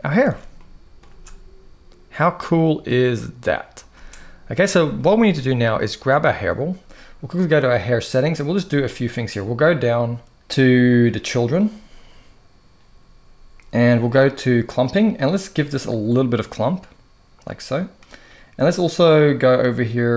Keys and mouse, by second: 0.0 alt+a, 0.3-0.8 middle drag, 0.8 space, 3.6 space, 4.7-5.0 middle drag, 7.5 click, 14.5 click, 15.8-17.8 drag.